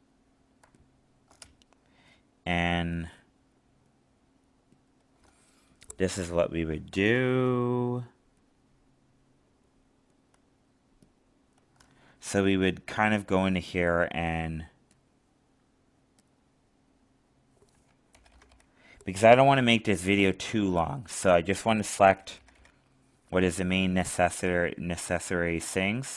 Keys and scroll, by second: 19.5 alt+space.